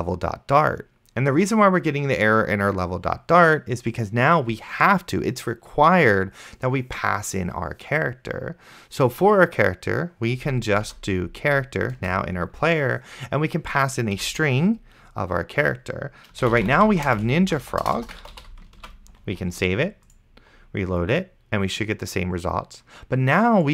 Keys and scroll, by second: 11.2 c, 12.0 Return, 14.2 ;, 16.3-19.0 typing, 19.1 ctrl+s.